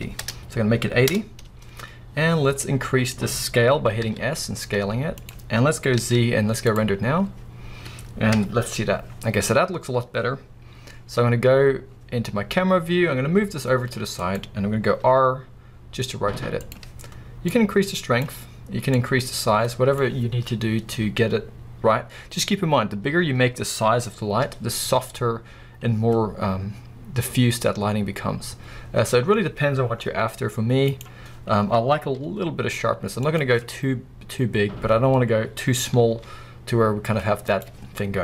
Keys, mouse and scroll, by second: 1.1 Return, 2.7-5.3 middle drag, 4.1 s, 5.3 click, 6.0 z, 8.3 KP_0, 9.1 scroll up 1, 10.6 scroll down 1, 11.2 scroll down 1, 12.5 g, 14.3 click, 15.0 r, 16.7 click, 17.6-31.1 drag, 24.4 s, 31.1 right click, 32.2 s, 33.4 click, 36.1 s, 37.8 right click.